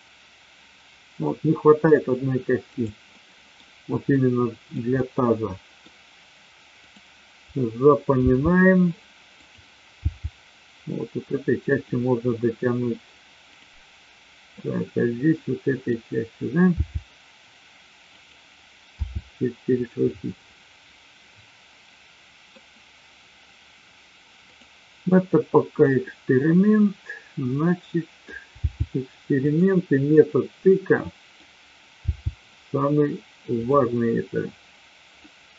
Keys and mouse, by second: 3.1-3.5 middle drag, 4.1-4.6 middle drag, 5.0 middle click, 6.7-7.6 drag, 8.1 g, 9.4 click, 9.8 g, 12.4-12.8 middle drag, 14.6-15.8 middle drag, 16.7 g, 18.8 r, 19.7 click, 20.1-22.6 middle drag, 24.4-25.4 drag, 26.1-28.2 middle drag, 28.6 g, 29.7-31.4 middle drag, 32.0 g, 35.2-35.5 middle drag.